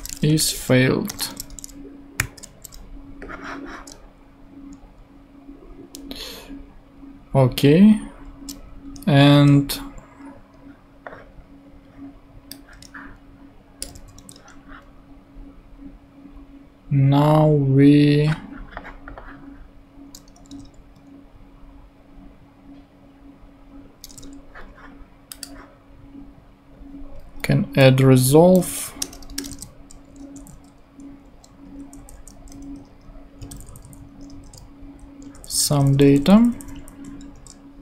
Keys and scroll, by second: 0.0-2.2 typing, 9.3 super+Tab, 14.2 super+Tab, 20.5 super+Tab, 24.1 super+Tab, 27.7 Down, 29.0 Return, 29.5 super+Return, 30.4 super+Left, 31.8 Left, 33.4 alt+shift+Right, 35.3 shift+Left, 37.3 shift+BackSpace.